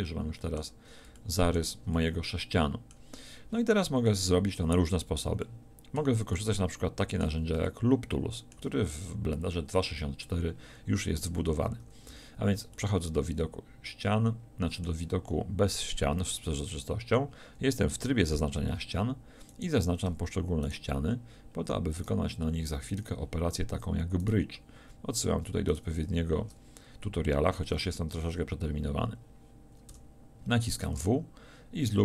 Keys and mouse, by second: 11.8 middle click, 11.8 a, 12.1 z, 29.9 w.